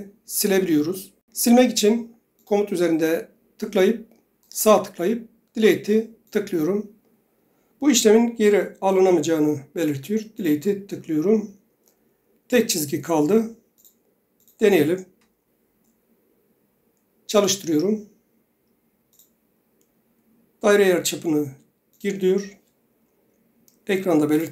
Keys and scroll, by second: 15.2 Delete.